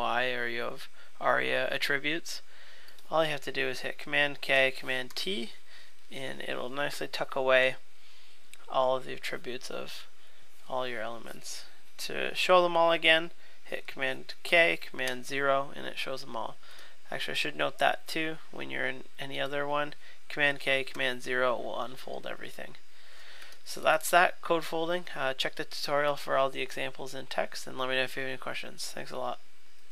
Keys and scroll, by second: 4.5 super+k, 5.1 super+t, 14.4 super+k, 15.0 super+0, 20.5 super+k, 20.9 super+0.